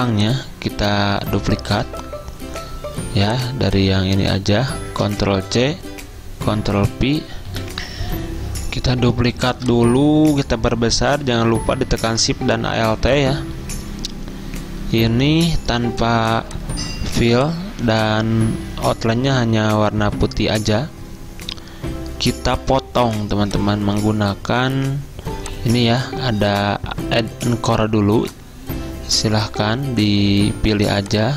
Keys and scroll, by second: 5.1 ctrl+c, 6.6 ctrl+f, 7.6 F10, 15.1 d.